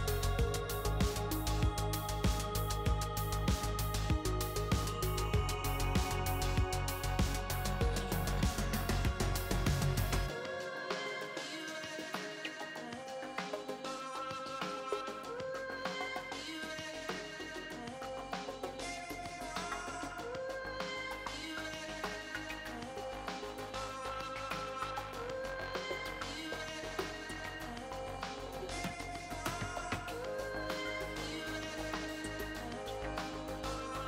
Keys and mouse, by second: 0.0 click, 0.4 middle click, 1.2 click, 2.2 i, 4.4 e, 8.4 click, 9.0-10.3 middle drag, 10.3 KP_Decimal, 12.4 i, 14.6 ctrl+r, 16.1 ctrl+r, 17.8 middle click, 18.7-20.3 drag, 20.3 middle click, 20.6 middle click, 21.3 middle click, 22.2 click, 23.9 middle click, 25.2 middle click, 25.3 middle click, 25.8 middle click, 26.8-28.1 middle drag, 28.3 middle click, 30.7 ctrl+r, 31.7 ctrl+r.